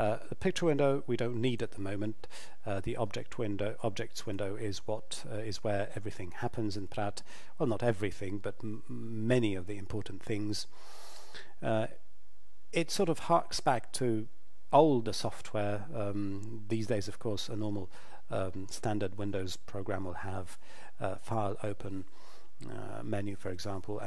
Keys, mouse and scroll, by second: 1.4 click.